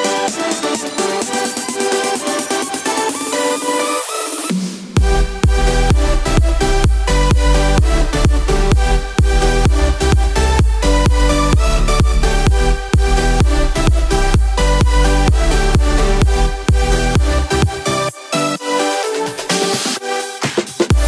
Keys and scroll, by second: 11.2 Return, 12.8 Return.